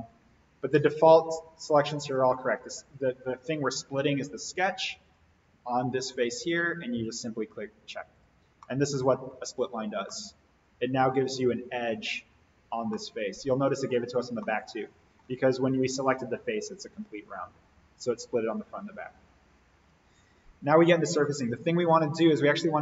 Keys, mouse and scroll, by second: 2.9 click, 8.4 scroll down 1, 8.6-9.5 middle drag, 11.3-12.9 scroll up 1, 12.9-14.1 middle drag, 19.0-20.9 scroll up 1, 21.8-22.8 scroll down 1.